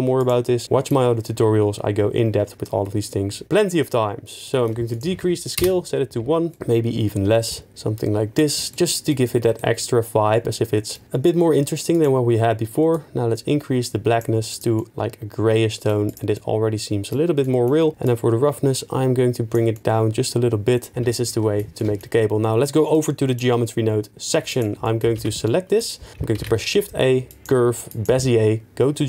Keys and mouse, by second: 5.0 click, 6.9 shift+click, 18.1-19.5 drag, 21.3 ctrl+s, 21.8-22.9 middle drag, 22.9 click, 24.6 drag, 24.8 middle click, 25.4 ctrl+s, 25.4 middle click, 26.3 shift+a.